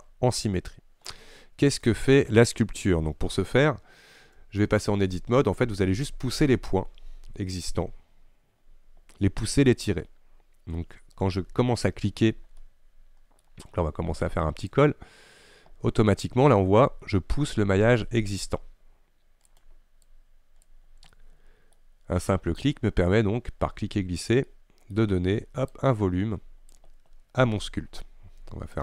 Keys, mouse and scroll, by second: 4.4 Tab, 10.8 Tab, 12.7-14.8 middle drag, 14.8-17.8 drag, 20.1-21.2 drag, 21.2 middle click, 21.8-22.7 scroll up 1, 22.7-24.6 drag, 24.6 middle click, 25.0-25.8 scroll up 1, 25.8-28.8 drag.